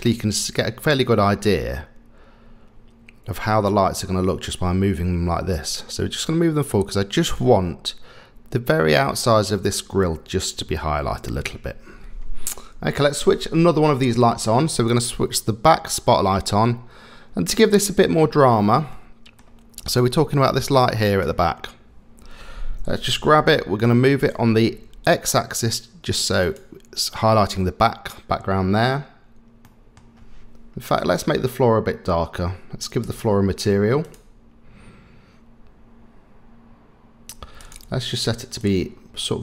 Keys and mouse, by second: 14.7 click, 18.9-19.4 middle drag, 19.8 click, 20.4 click, 21.0 click, 23.0 g, 29.6-30.0 middle drag, 31.0 click, 37.7 click.